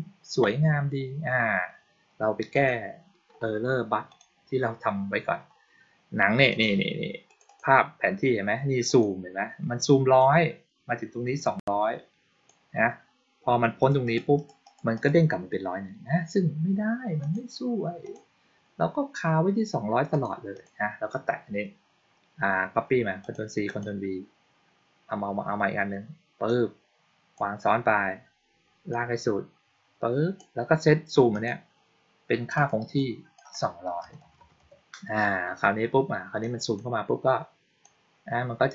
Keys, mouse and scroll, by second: 2.4 click, 4.0 click, 6.4 click, 7.1 click, 7.3 click, 8.7 click, 10.0-12.3 drag, 13.7 click, 13.9 click, 14.2 click, 14.5 click, 14.8 click, 17.1 click, 17.9 click, 20.0 click, 20.4 click, 23.1 click, 23.5 click, 26.3-27.2 drag, 28.8-30.2 drag, 31.2 click, 32.4 click, 32.8 click, 36.3 click, 37.7-38.7 drag.